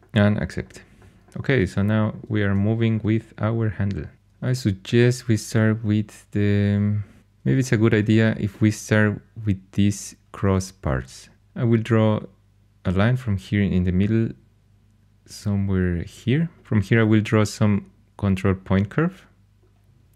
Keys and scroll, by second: 11.3 shift+a.